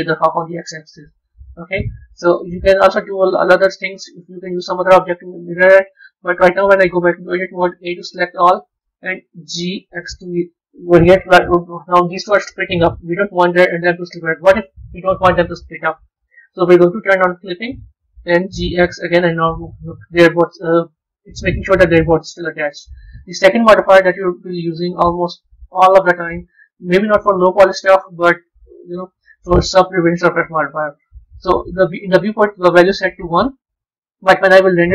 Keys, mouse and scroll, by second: 1.2 click, 2.1 Tab, 3.3-5.9 scroll down 2, 5.9-6.8 middle drag, 6.8 b, 17.3 click, 22.1 Tab, 23.4 scroll up 4, 24.3 click, 25.4 click, 25.9 click, 33.2-33.7 scroll up 3, 33.9-34.9 middle drag.